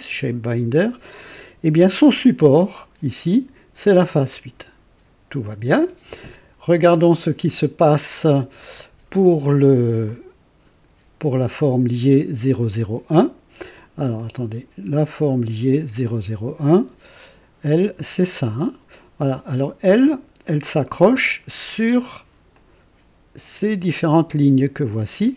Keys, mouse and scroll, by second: 6.4 scroll up 1, 10.0 click, 11.1 space, 14.1 click, 14.7 typing, 16.0 click, 16.7 typing, 19.0 space, 19.1 space, 20.0 click, 20.6 space, 22.5 click, 23.8 click.